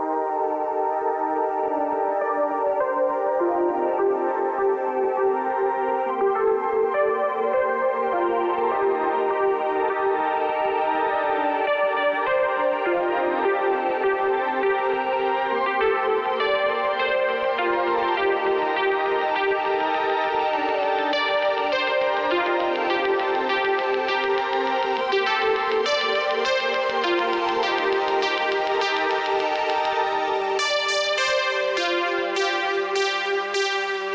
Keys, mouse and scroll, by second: 6.2 space, 7.3 space, 8.8 space, 10.1 space, 22.7 space, 23.9 space, 26.3 space, 28.7 space, 31.4 v, 32.6 space, 33.3 click, 33.3 s, 33.9 click.